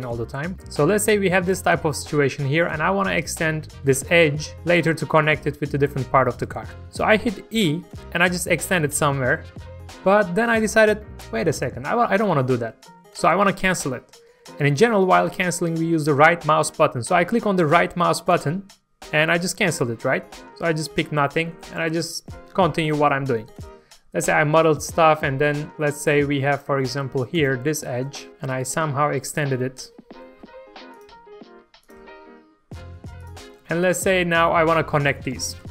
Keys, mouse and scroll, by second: 0.5-1.5 middle drag, 1.9 1, 3.2 click, 3.6 ctrl+shift+click, 4.9 scroll down 1, 5.2 shift+middle click, 6.2-6.8 scroll up 1, 6.9 shift+middle click, 7.6 e, 18.3 right click, 21.1 alt+a, 21.4-25.7 shift+middle drag, 26.5 click, 27.3 click, 28.3 e, 29.3 click, 29.7 middle click, 30.4 e, 30.9 click, 31.1 e, 31.8 click, 31.9 e, 33.3 click, 33.6 middle click, 35.6 g.